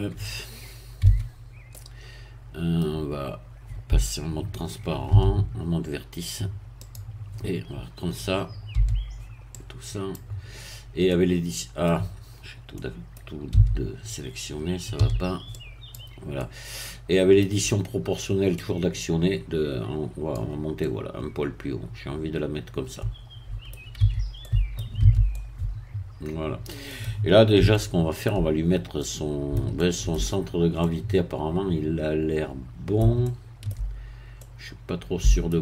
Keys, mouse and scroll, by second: 1.0 Tab, 1.7-3.0 middle drag, 5.1 z, 6.8 click, 8.7 b, 9.6-10.6 drag, 10.6-11.0 scroll down 1, 11.0-12.2 middle drag, 12.4-12.7 scroll up 1, 12.7 middle click, 13.5 a, 15.0 b, 15.6 click, 16.4-17.6 middle drag, 18.6-20.8 drag, 22.0-24.0 middle drag, 24.0 Tab, 24.4 middle click, 25.0 z, 25.3-27.2 middle drag, 27.7 shift+middle click, 28.7 shift+scroll up 1, 29.0 middle click, 30.4-30.8 shift+scroll up 1, 30.8-33.8 middle drag, 34.0 shift+scroll up 1, 34.4-35.6 middle drag.